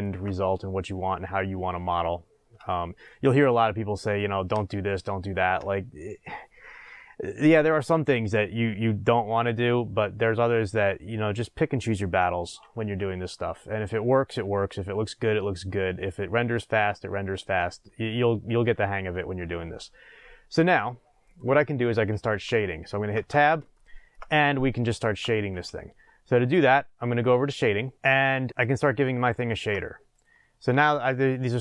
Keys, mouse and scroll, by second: 2.0-2.7 scroll down 2, 21.2 click, 23.1 Tab, 23.7-27.9 shift+middle drag, 27.9 click, 28.4-30.2 shift+middle drag, 30.2 click, 30.9-31.6 shift+middle drag.